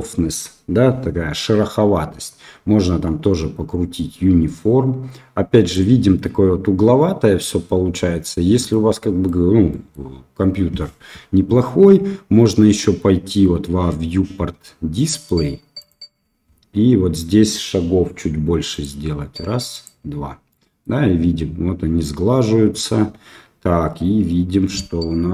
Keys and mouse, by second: 2.8-5.7 drag, 8.7 middle click, 9.7 middle click, 15.7 click, 18.7 click, 19.7 click, 20.5 middle click.